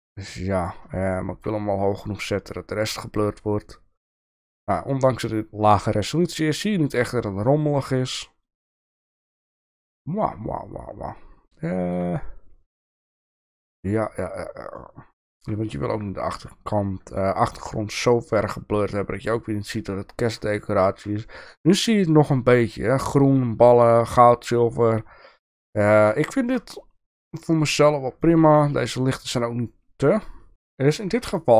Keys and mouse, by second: 0.1 click, 0.5 click, 1.1-1.5 shift+middle drag, 2.9 shift+middle drag, 7.2-10.2 shift+middle drag, 11.7 shift+middle drag, 12.8 shift+middle drag, 14.7 shift+middle click, 17.3 shift+middle click, 20.6-21.0 shift+middle drag, 26.3 shift+middle drag, 28.2-28.5 shift+middle drag, 31.3 shift+middle click.